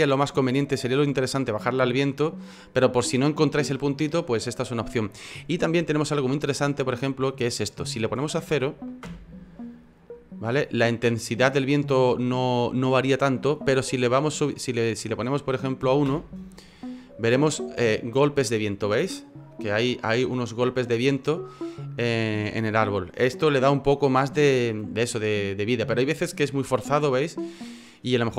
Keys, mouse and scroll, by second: 5.8 F9, 13.4 F9.